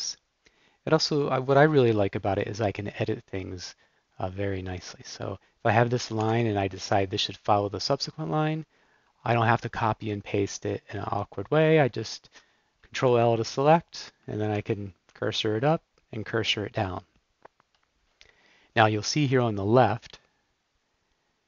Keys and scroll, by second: 6.2 super+l, 13.0 shift+super+l, 14.5 super+Down, 15.1 super+Down.